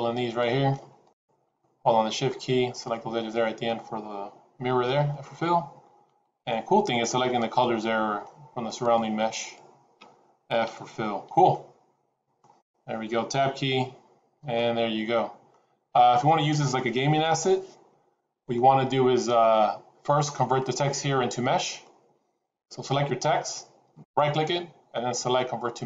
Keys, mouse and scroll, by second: 0.2 click, 0.9 shift+click, 1.5 middle click, 2.6 shift+click, 3.1 shift+click, 4.9 f, 6.3 click, 7.0 shift+click, 7.6 middle click, 8.7 shift+click, 9.9 shift+click, 10.6 f, 11.0 scroll down 2, 11.4 middle click, 12.5-13.4 scroll down 3, 13.4 Tab, 14.0-14.4 scroll down 2, 14.5 middle click, 15.6-16.2 scroll down 2, 18.2 middle click, 18.2-18.8 scroll down 1.